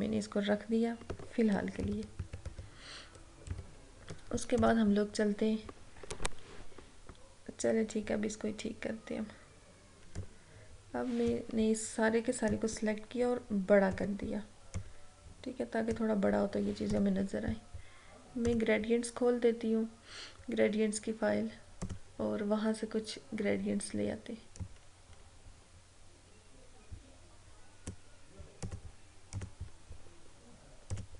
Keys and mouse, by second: 1.5 click, 1.9 ctrl+-, 3.5 ctrl+=, 4.6 click, 10.3-17.0 drag, 21.8 click, 24.6-28.6 drag.